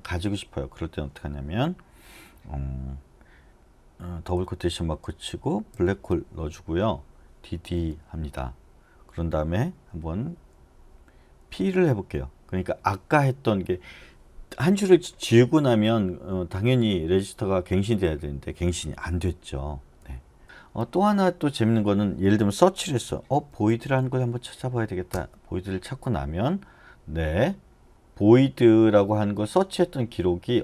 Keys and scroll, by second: 7.5 d, 7.8 d, 10.3-11.6 typing, 20.0 u, 20.4 u, 22.8-24.5 typing, 25.1 Return.